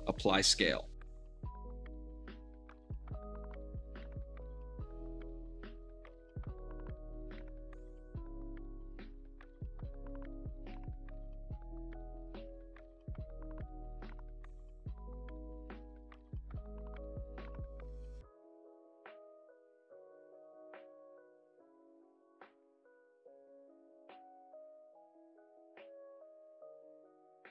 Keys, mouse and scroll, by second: 0.0 click, 0.9 `, 1.2-3.4 shift+middle drag, 3.1 Tab, 3.4 g, 3.5 middle click, 3.9 click, 4.0 shift+middle click, 4.5 g, 4.6 middle click, 4.8 click, 4.9 shift+middle click, 5.3 shift+middle click, 5.7 g, 5.8 click, 6.5 middle click, 7.1 g, 8.3 click, 8.8-9.3 middle drag, 9.9 middle click, 10.4 shift+d, 10.8 middle click, 10.8 click, 11.2 g, 11.6 middle click, 12.2-14.9 shift+middle drag, 15.0 middle click, 15.1 click, 15.6 m, 16.0 Return, 16.2-18.0 middle drag, 18.4 ctrl+a, 19.3-20.1 drag, 20.1 middle click, 20.3 r, 20.6 ctrl+click, 20.7 g, 21.7-22.6 middle drag, 22.6 scroll down 1, 22.8 middle click, 23.0 shift+z, 23.4-24.8 middle drag, 24.8 shift+click, 25.0 shift+d, 25.1 middle drag, 25.4 click, 25.4 shift+d, 25.5 middle drag, 25.7 drag, 25.9 middle drag, 26.2 alt+middle click, 26.8-27.5 alt+middle drag.